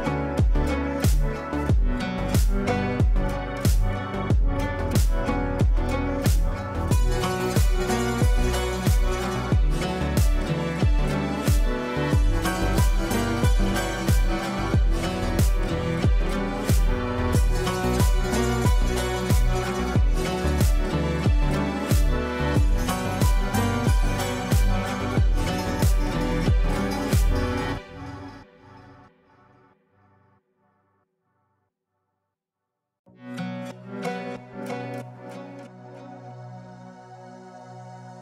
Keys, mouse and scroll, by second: 1.0-8.3 drag, 4.8-6.8 drag, 8.3 click, 9.4 F2, 9.9-13.0 drag, 13.6 click, 13.7 click, 16.5 click, 16.6 ctrl+space, 17.1 Return, 19.6 space, 25.5 space, 27.9 space, 29.5 click, 31.2 click, 36.5 F4, 37.8 click.